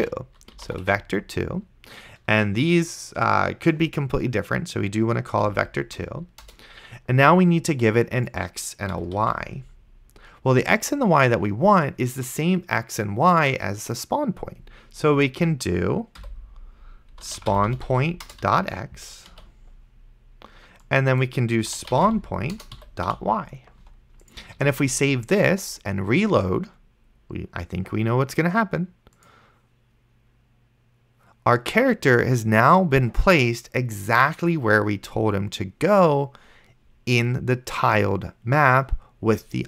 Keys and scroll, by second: 0.0-0.9 typing, 5.7 Down, 6.5 Return, 9.0 ,, 9.5 ctrl+s, 16.5 Left, 16.9-19.3 typing, 21.4-23.1 typing, 24.9 ctrl+s.